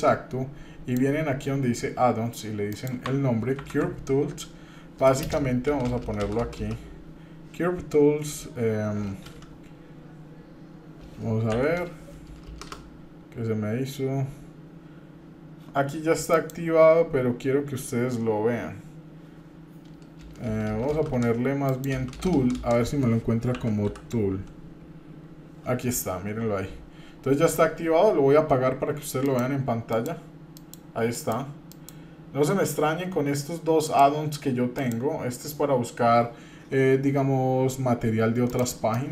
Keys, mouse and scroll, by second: 16.3 click, 19.8-21.1 typing, 33.8 click, 34.7 click.